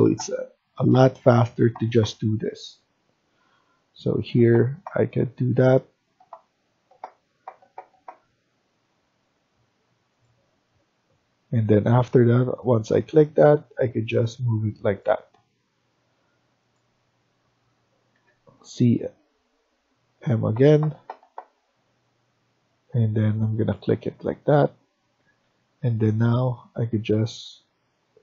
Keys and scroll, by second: 11.5 Escape, 11.7 Escape, 15.1 Escape, 18.1-18.5 typing, 25.1 Escape, 25.4 Escape.